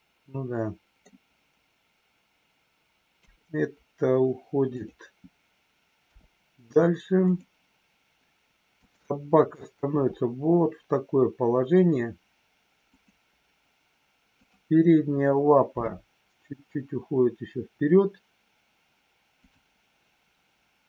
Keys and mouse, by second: 3.1 KP_3, 4.6 click, 8.6 click, 9.9 r, 14.2 click, 19.3 click.